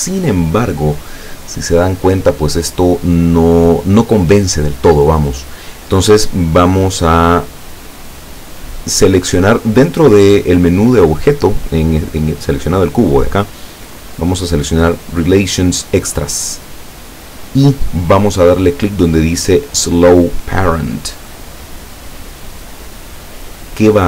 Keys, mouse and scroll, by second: 5.4 click, 7.0 click, 7.8 click, 16.1 click, 22.0 click.